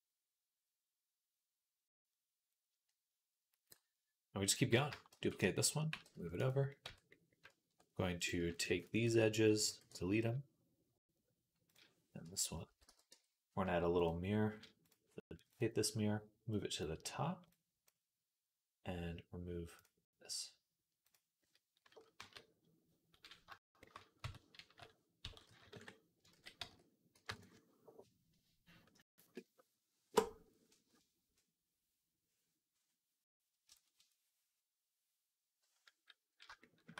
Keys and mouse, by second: 4.9 shift+d, 5.2-9.4 middle drag, 5.7 g, 6.7 Tab, 8.0 click, 8.6 ctrl+alt+shift+click, 9.4 x, 11.5 click, 12.1 l, 12.5 x, 12.9 Tab, 13.8 click, 14.6-17.8 drag, 19.6-21.0 drag, 22.0 KP_3, 24.0 Tab, 24.4 a, 25.0 s, 26.0-36.9 ctrl+middle drag, 26.2 ctrl+z, 26.5 s.